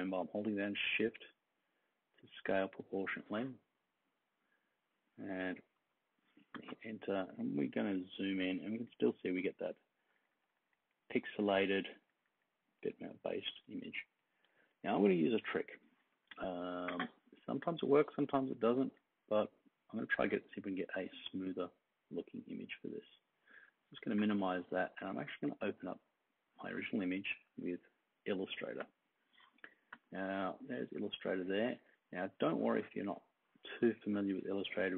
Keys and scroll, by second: 5.7 Return, 7.6 super+=, 8.0 super+=, 8.3 super+=, 8.5 super+=, 9.9 super+-, 10.2 super+-, 10.3 super+-, 10.4 super+-, 11.1 super+=, 11.5 super+=, 11.8 super+=, 12.7 super+=, 13.1 super+-, 13.6 super+-, 14.5 super+-.